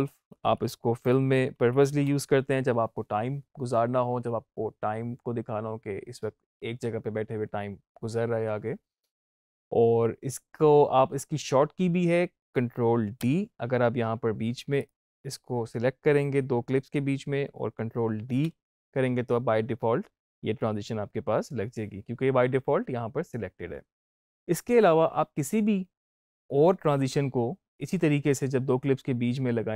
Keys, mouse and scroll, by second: 0.8 click, 0.9 Up, 1.5 -, 12.3 click, 14.7 click, 18.1 ctrl+Num_Lock, 18.1 click, 18.2 ctrl+d.